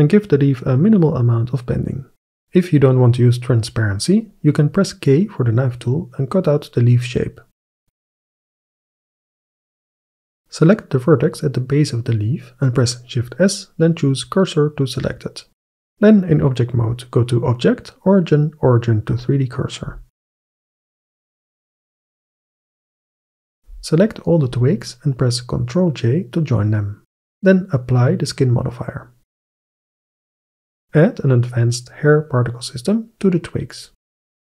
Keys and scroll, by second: 0.0-1.2 typing, 2.6 KP_7, 4.3 k, 7.8 Return, 8.3 3, 8.9 ctrl+i, 9.4 Delete, 10.4 Tab, 10.7 1, 16.3 Tab, 26.0 ctrl+j, 26.3 Return.